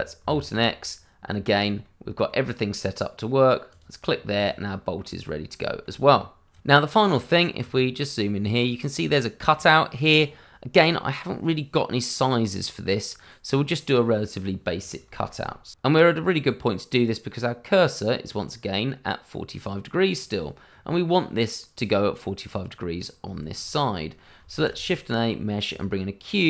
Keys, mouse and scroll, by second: 0.3 alt+x, 1.8 middle click, 3.7 click, 4.1 scroll down 1, 4.3 click, 4.7 middle click, 5.2-5.6 scroll up 1, 5.6 shift+middle click, 7.6-8.5 scroll up 1, 8.5 middle click, 12.7-13.1 scroll up 1, 13.1-14.0 scroll down 1, 14.0 middle click, 14.3 click, 14.5 middle click, 14.6 shift+middle click, 14.9 middle click, 23.3 shift+middle click, 23.4 middle click, 23.6 shift+scroll up 1, 23.8 middle click, 24.5 shift+a, 25.6 click.